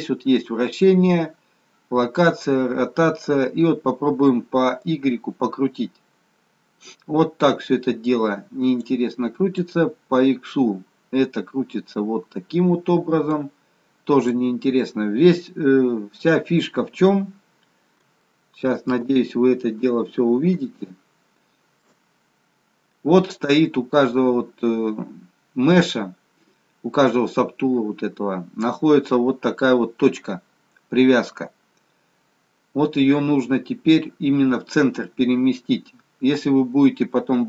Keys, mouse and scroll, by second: 4.9 click, 9.6 click, 16.0-16.9 scroll up 5, 16.9-18.4 scroll up 1, 19.7 shift+middle click, 20.6 shift+middle click, 22.1-23.2 scroll up 3, 23.2-23.6 scroll down 1, 23.6-24.2 scroll down 1, 24.2-24.9 scroll down 2, 25.2-28.2 scroll down 2, 28.3-28.7 scroll up 2, 32.6-34.5 scroll down 9, 34.5-35.6 scroll up 3.